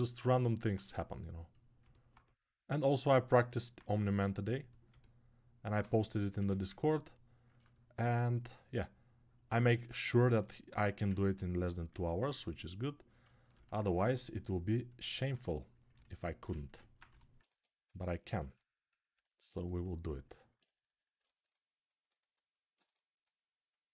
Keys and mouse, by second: 6.1 1, 10.4-16.0 right drag, 12.0 2, 13.8 2, 16.5 alt+right click, 16.9 g, 21.2-23.9 alt+right drag.